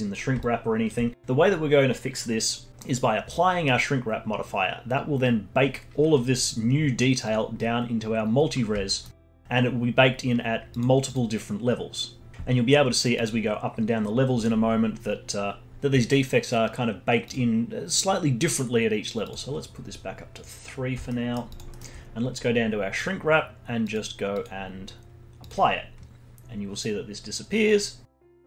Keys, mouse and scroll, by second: 0.5 scroll down 2, 0.8-2.7 alt+drag, 7.2-8.9 drag, 8.9-10.7 alt+middle drag, 10.7-12.3 drag, 13.1-15.7 drag, 17.2-21.1 drag, 21.1 alt+middle click, 21.5 alt+click, 21.7 alt+middle click, 22.2-23.3 scroll down 6, 23.3-23.8 scroll down 1, 23.8 click, 24.3-27.9 drag.